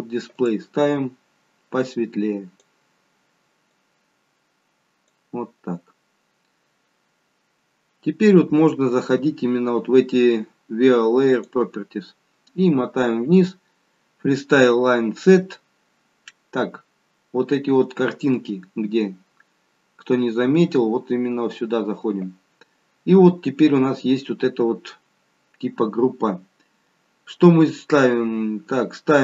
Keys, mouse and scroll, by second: 0.2 click, 11.2 click, 12.6-13.4 scroll down 4, 13.1-13.4 scroll up 1, 25.7-28.8 scroll down 2.